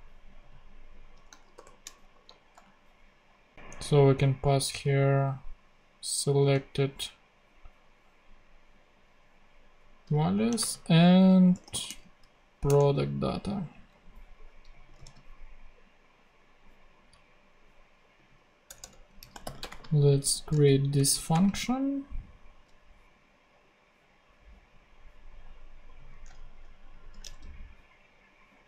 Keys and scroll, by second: 1.5 shift+9, 2.1 shift+Right, 2.5 ;, 4.7 super+c, 10.6-12.3 typing, 12.6 Return, 15.0 super+c, 18.6 Return, 18.9-20.1 typing, 20.5 super+space, 21.2 =, 21.3 space, 26.4 shift+super+Right, 27.0 shift+super+Left, 27.2 shift+super+c, 28.3 super+c.